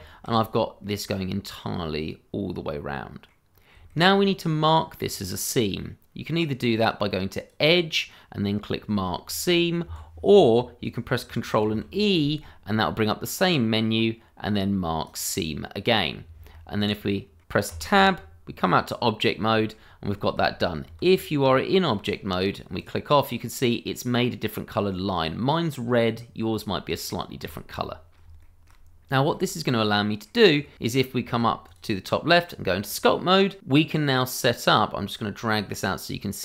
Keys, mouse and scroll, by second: 0.5-0.8 scroll down 1, 0.8 middle click, 7.3 click, 9.8 Escape, 11.7 ctrl+e, 15.0 click, 15.8-16.1 scroll down 1, 16.5 middle click, 17.7 Tab, 18.2-18.7 scroll down 1, 18.7 middle click, 19.8-20.2 scroll up 1, 20.2 shift+middle click, 20.4-20.8 scroll up 1, 20.8 Tab, 21.4-21.8 scroll up 1, 21.9 shift+middle click, 22.1-22.8 scroll up 1, 22.8 click, 23.2-25.3 scroll up 1, 25.3-25.8 scroll down 1, 26.7 shift+middle click, 27.1-27.4 scroll down 1, 27.4 Tab, 27.8-28.2 scroll down 1, 28.4 shift+middle click, 28.5 middle click, 28.5 shift+middle click, 28.9-29.3 scroll down 1, 29.3 shift+middle click, 29.8 middle click, 31.6 click, 35.3 click.